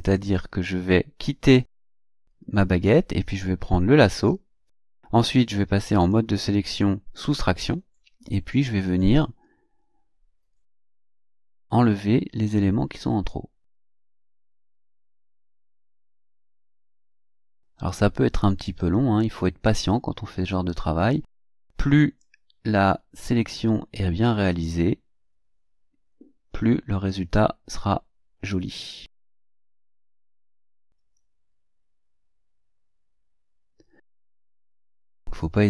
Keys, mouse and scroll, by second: 0.0 click, 4.1 click, 5.9 click, 7.1 click, 8.5 scroll down 2, 13.3-14.9 drag, 15.4-17.2 drag, 17.5-19.4 drag, 19.6-21.3 drag, 22.2-29.3 drag, 30.6-34.4 drag, 35.0-35.6 drag.